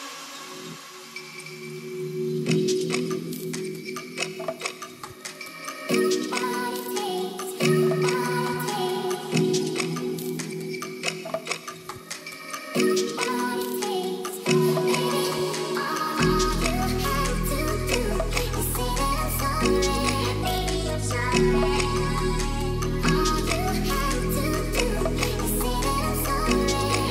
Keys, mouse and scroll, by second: 0.6 click, 1.0 s, 2.1 click, 2.6 Tab, 2.7-3.0 drag, 3.2 Tab, 3.2 click, 3.6 shift+z, 3.9 click, 4.4 shift+click, 5.0 click, 5.3 shift+click, 5.7 click, 6.1 middle click, 7.0 1, 7.1 click, 7.8 g, 8.3 click, 8.5 Tab, 8.8 shift+z, 9.0 click, 9.4 ctrl+s, 9.7 click, 9.8 Tab, 10.8-11.4 drag, 11.4 middle drag, 11.6 shift+middle click, 12.9 Tab, 12.9 middle click, 13.4 click, 13.8 2, 13.8 click, 14.1 shift+middle click, 14.4 g, 14.6 z, 15.8 click, 17.7 click, 18.7 shift+click, 19.2 shift+z, 19.5 middle click, 20.0 shift+click, 20.3 shift+click, 20.6 shift+click, 21.5 middle click, 21.8 g, 21.9 y, 22.2 x, 23.6 click, 23.9 Tab, 24.0 middle click, 24.4 shift+z, 24.9 shift+click, 24.9 shift+z, 25.1 click, 25.3 Tab, 25.9 g, 26.1 z, 26.6 Tab, 26.8 click.